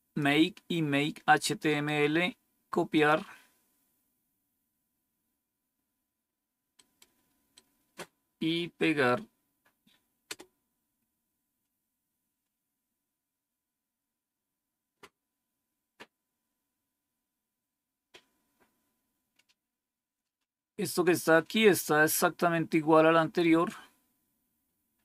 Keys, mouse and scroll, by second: 1.6 right click, 2.9 click, 6.7 right click, 7.5-8.7 right drag, 10.2 Return, 15.0-15.3 scroll down 3, 16.5 scroll down 1, 17.0 scroll down 1, 18.6 scroll up 1, 20.6 scroll up 1, 24.7 scroll down 1.